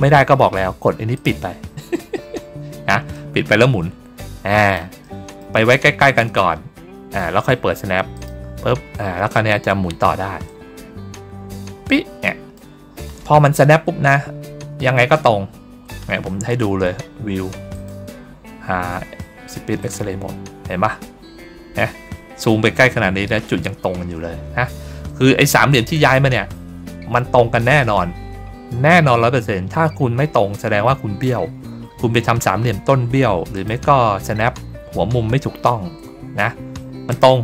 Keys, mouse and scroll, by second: 1.0 click, 3.0-4.6 drag, 4.9 middle click, 6.2 click, 8.0 click, 8.6 ctrl+middle click, 10.4-12.4 drag, 13.8 ctrl+middle click, 14.2 ctrl+middle click, 14.6 ctrl+middle click, 15.2 ctrl+middle click, 17.6 click, 19.7 click, 21.0 ctrl+middle click, 24.1 ctrl+middle click, 24.4 ctrl+middle click, 25.8 click, 26.4 ctrl+middle click, 30.8 middle click, 31.4 ctrl+scroll down 1, 33.4 click, 34.6 ctrl+scroll up 1, 35.5 ctrl+scroll down 2, 37.0 click.